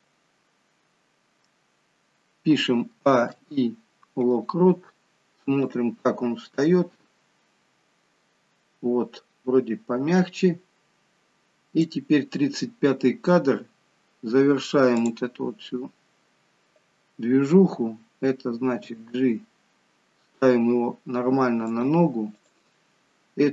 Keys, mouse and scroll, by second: 2.9 a, 3.2 i, 5.6 click, 14.0-14.9 scroll up 1, 14.9 click, 18.6 g, 22.3 click, 22.8-23.2 scroll down 1.